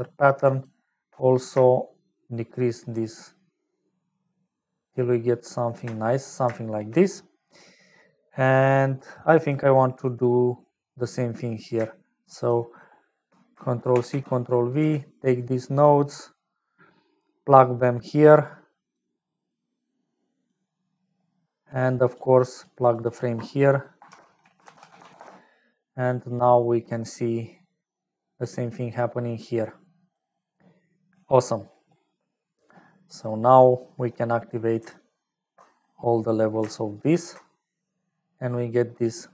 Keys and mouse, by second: 0.5 shift+click, 1.8-5.7 shift+drag, 6.4 shift+middle click, 7.2 middle click, 8.7 middle click, 9.6 middle click, 10.6 click, 12.3 shift+click, 13.7 ctrl+c, 14.4 ctrl+v, 14.7 g, 16.5 click, 18.0-19.0 drag, 19.5-20.6 drag, 20.8 middle click, 21.7 click, 22.4 click, 22.9-25.7 drag, 26.9-30.9 drag, 32.8 middle click, 34.1 middle click, 34.9 ctrl+alt+click, 36.2 middle click, 36.9 ctrl+alt+click, 38.3-39.3 middle drag.